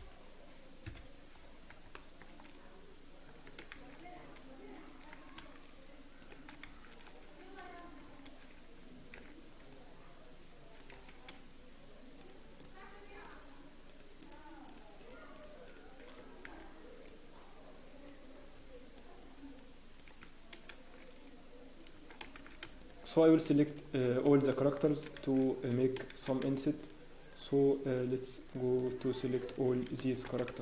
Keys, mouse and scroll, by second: 0.8 KP_3, 1.3-1.7 scroll up 1, 1.3 KP_1, 1.9 shift+middle click, 3.7 scroll up 5, 3.7 shift+z, 5.3 alt+a, 6.2 click, 6.6 shift+z, 7.0 scroll up 1, 7.6 a, 8.2 alt+a, 8.2 scroll up 1, 9.2-10.5 scroll up 1, 9.2 c, 16.0 shift+click, 16.4 c, 20.7 shift+7, 21.9 shift+z, 22.8 shift+right click, 24.0 shift+click, 24.0 shift+z, 24.1 scroll down 1, 24.5 shift+middle click, 24.8 scroll down 3, 24.8-26.0 scroll up 5, 25.2 shift+z, 26.1 shift+z, 26.5 shift+click, 28.5 shift+click, 29.8 shift+click, 29.9 shift+middle click, 30.5 shift+z.